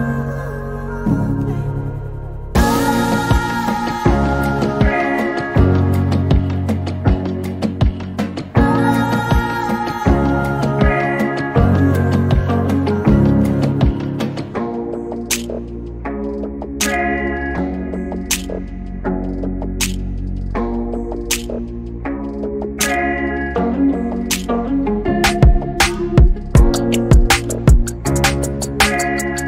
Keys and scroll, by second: 7.9-9.4 typing, 11.1 m, 15.0-15.9 typing, 17.3-18.8 typing, 19.8-21.2 typing, 22.6 e, 27.1 m.